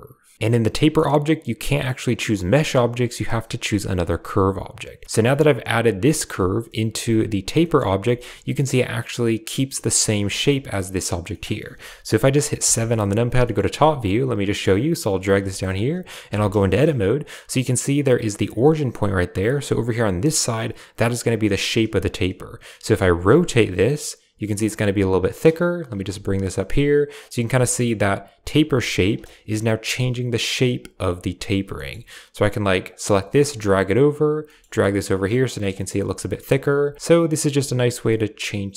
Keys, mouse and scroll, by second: 0.0-0.3 typing, 5.1 shift+drag, 6.5 shift+drag, 7.5 shift+click, 7.5 shift+middle drag, 7.9 shift+middle drag, 10.2 shift+middle drag, 11.2 middle click, 12.5 KP_7, 13.3 shift+click, 14.2 click, 14.4 g, 15.4 shift+click, 16.2 Tab, 16.4 shift+middle click, 21.9 right click, 22.6 g, 23.2 r, 25.0 right click, 25.7 right click, 25.9 g, 27.5 shift+click, 28.5 g, 29.2 s, 30.7 g, 31.5 g, 32.9 click, 33.1 g, 34.1 click, 34.3 g, 35.6 shift+click, 36.7 r, 36.9 g, 37.4 r.